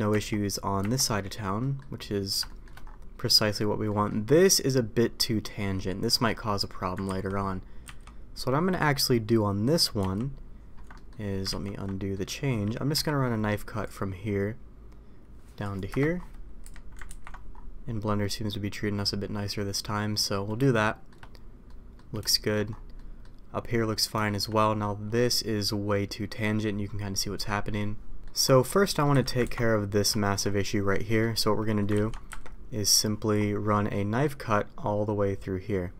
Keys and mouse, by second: 0.1 Tab, 1.6 middle click, 2.4 shift+middle click, 3.1 middle click, 3.8 middle click, 7.3 ctrl+z, 10.9 middle click, 11.9 middle click, 12.9 k, 16.6 a, 17.1 ctrl+t, 18.5 middle click, 20.1 middle click, 20.7 shift+middle click, 21.6 middle click, 22.2 shift+middle click, 22.9 middle click, 24.2 shift+middle click, 28.9 middle click, 29.1 a, 29.4 ctrl+t, 30.1 shift+middle drag, 31.0 middle click, 31.9 ctrl+z, 32.2 KP_7, 33.9 middle click.